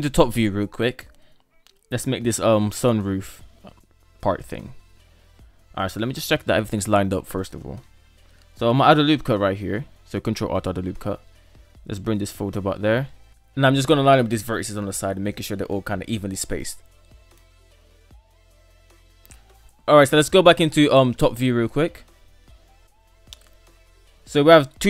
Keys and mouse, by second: 0.0 KP_7, 1.0 shift+middle drag, 4.8 alt+z, 6.2 shift+middle click, 8.4 ctrl+r, 12.3-12.8 middle drag, 13.2-13.6 shift+middle drag, 14.2 shift+middle drag, 15.1 alt+z, 15.4 right click, 16.1 shift+right click, 17.3-19.7 typing, 17.8 Return, 18.0 Tab, 18.4 shift+middle click, 18.5 right click, 19.0 Tab, 19.2 Tab, 19.6 Tab, 20.1 Tab, 20.7 shift+middle click, 22.0 shift+middle click.